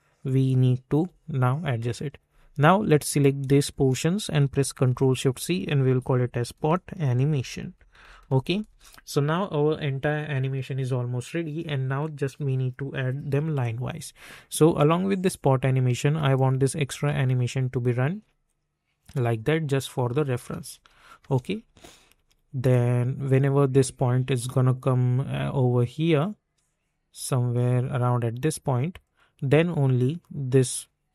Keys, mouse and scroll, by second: 0.9 u, 3.1 click, 4.9 ctrl+shift+c, 5.7-8.2 typing, 8.6 Return, 14.7-16.3 drag, 16.9 space, 20.2 space, 22.7-27.1 drag, 27.1 space, 29.0-31.1 drag.